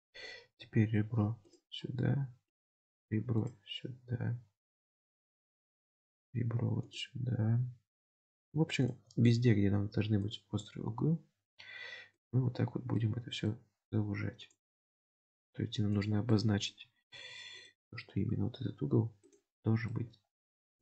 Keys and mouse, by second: 5.3 middle click, 13.1-16.2 middle drag, 16.4 middle click, 19.7 middle click.